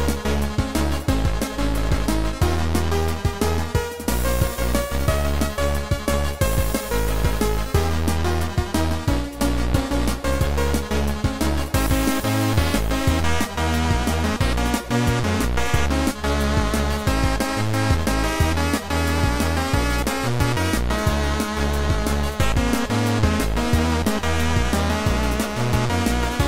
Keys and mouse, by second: 2.5 click, 2.9 click, 10.8 click, 11.2 click, 12.8 click, 13.3 click, 15.4 click, 16.4 click, 19.6 click, 20.2 click, 21.2 click, 22.0 click, 23.0 click, 24.5 shift+click, 25.5 click.